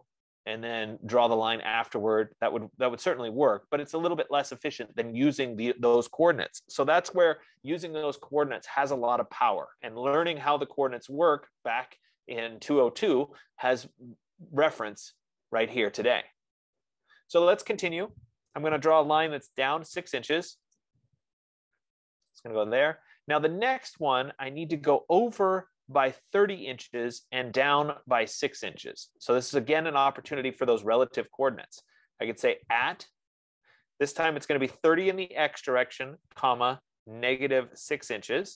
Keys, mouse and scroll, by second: 18.8-20.7 typing, 20.9 Return, 22.9-25.6 drag, 32.3 click, 32.9 @, 34.9-35.3 typing, 36.6-38.5 typing.